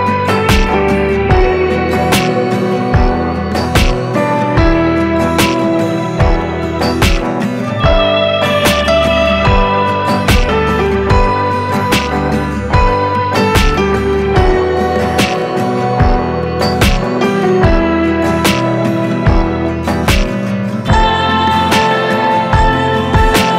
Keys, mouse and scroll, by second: 2.7 ctrl+alt+Num_Lock, 2.7 ctrl+alt+scroll down 1, 3.7-11.8 drag, 11.8-16.4 drag, 16.4-20.4 drag, 20.4-22.4 drag, 22.4 ctrl+space.